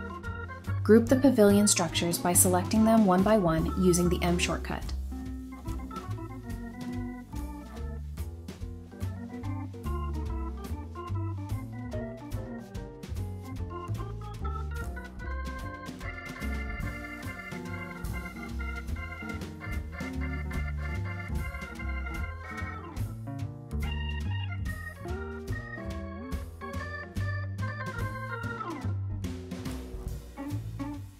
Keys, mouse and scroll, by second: 3.4 m, 4.5-5.9 typing, 6.0 Return, 8.1 typing, 9.9 typing, 11.0 typing, 12.2 typing, 13.2 scroll up 1, 13.5 double click, 15.4 typing, 18.1-18.9 typing, 20.4 double click, 21.6-23.1 typing, 22.6-23.1 scroll down 1, 23.3 double click, 25.9-26.9 typing, 26.1 Return, 28.0-28.9 typing.